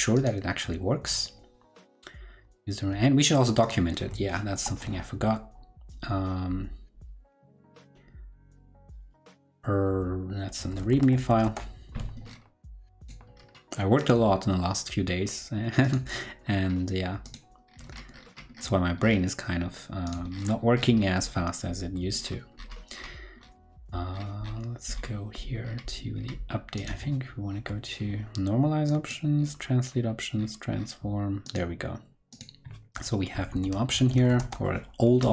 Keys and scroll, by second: 4.5 shift+super+o, 34.1 super+Right.